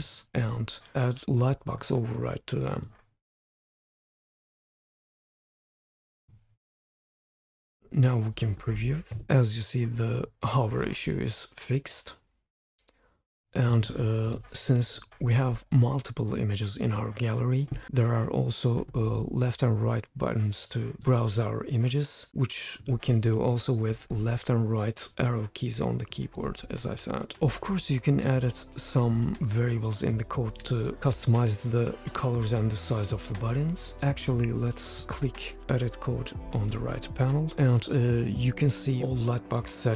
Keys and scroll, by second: 9.1 super+p, 24.0 Left, 26.4 BackSpace, 34.1 Escape.